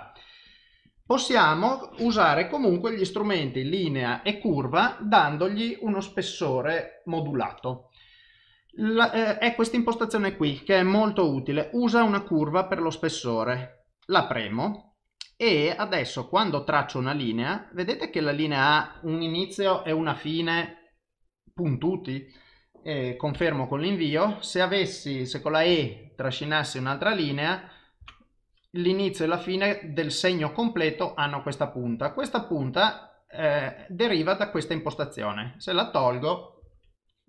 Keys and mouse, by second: 0.0 click, 0.5 click, 0.9 click, 2.8 click, 14.2 click, 16.0 click, 24.2 click, 34.3 click, 35.0 click.